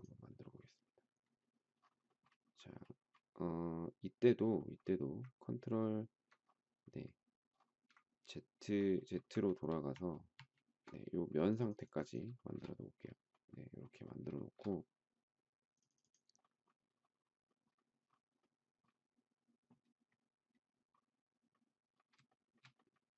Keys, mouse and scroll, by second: 9.4 ctrl+z, 12.3 shift+middle click, 14.3 shift+middle click, 22.2 shift+middle click.